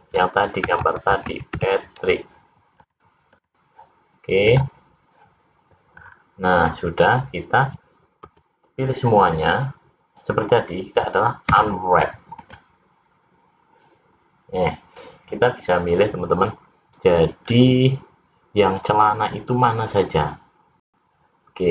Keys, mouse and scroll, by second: 5.1 click.